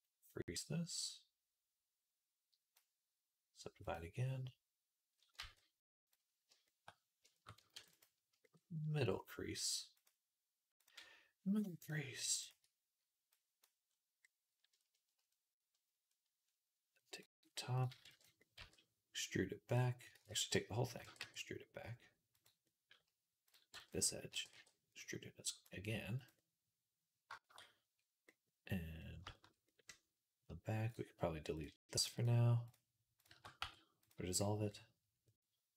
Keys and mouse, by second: 0.3-3.7 drag, 3.7-5.7 middle drag, 5.4 ctrl+z, 5.7-7.9 drag, 7.6 ctrl+r, 7.9-9.8 shift+middle drag, 9.8 click, 10.7-12.3 middle drag, 12.3 shift+click, 12.4 middle click, 13.2-20.2 drag, 17.9 b, 18.4 e, 20.0 ctrl+z, 20.2-22.5 middle drag, 20.6 a, 20.9 e, 23.3 click, 23.5 b, 24.1 e, 26.5-30.7 middle drag, 30.7 click, 31.4 middle click, 32.0 alt+shift+click, 32.1-35.1 alt+shift+middle drag, 33.4 x, 35.2 middle click.